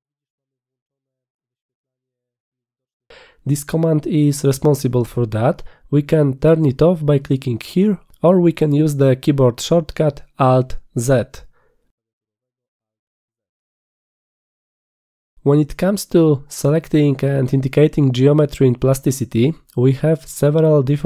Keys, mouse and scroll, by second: 8.3 click, 9.1 click, 12.5 alt+z, 13.3 alt+z, 13.9 alt+z, 14.3 alt+z.